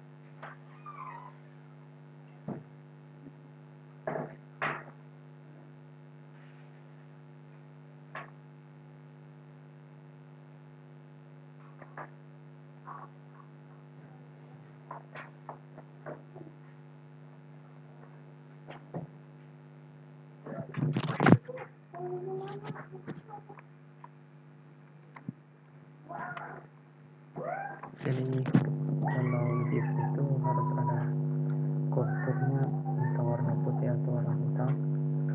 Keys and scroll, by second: 25.7 ctrl+g, 26.8 ctrl+z, 27.7 ctrl+z, 32.2 ctrl+q, 32.5 ctrl+k, 32.7 ctrl+u.